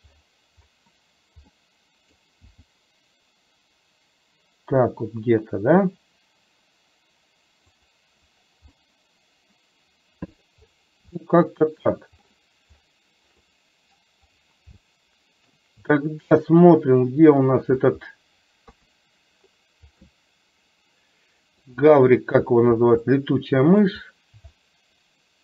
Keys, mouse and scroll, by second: 1.6 middle click, 2.6 g, 8.8-10.4 middle drag, 11.3 scroll up 1, 11.5-11.9 shift+middle drag, 13.6-14.2 middle drag, 14.9-15.6 shift+middle drag, 15.6 shift+scroll down 1, 18.8 KP_3, 20.2-21.7 middle drag, 23.1 scroll up 1, 23.3 middle click, 24.7-25.4 shift+middle drag.